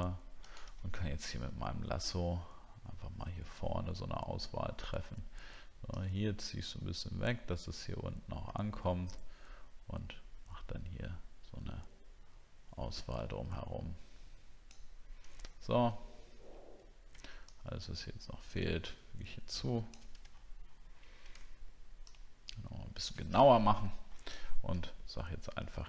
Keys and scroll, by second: 0.9-1.2 alt+scroll up 1, 15.5 alt+scroll down 1, 20.3 alt+scroll up 1, 20.9 alt+scroll up 1, 23.4 alt+scroll down 1, 24.4 alt+scroll down 1.